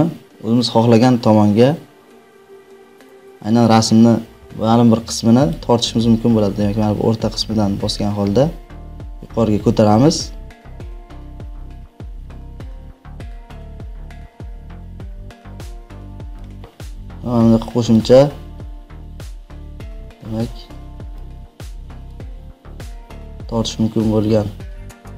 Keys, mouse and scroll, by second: 22.0 click.